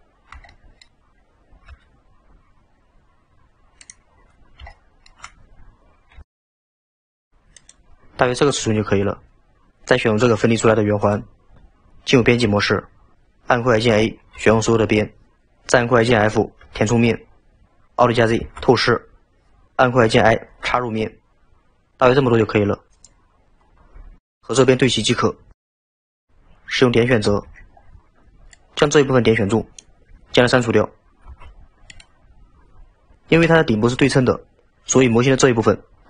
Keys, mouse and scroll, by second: 0.5-0.8 shift+middle drag, 4.1-4.7 scroll up 4, 4.7-6.1 shift+middle drag, 6.1 s, 11.1 click, 12.2 Tab, 14.4 a, 18.4 alt+z, 19.0-20.1 scroll up 1, 20.1-20.6 scroll up 1, 20.6 i, 27.3 1, 27.8 scroll down 2, 28.5 click, 31.3 x.